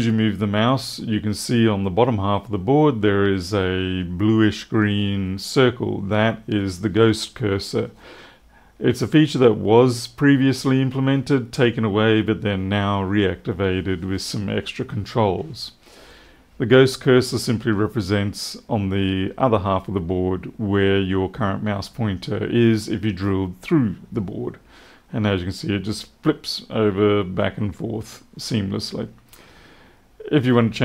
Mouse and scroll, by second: 30.3 click.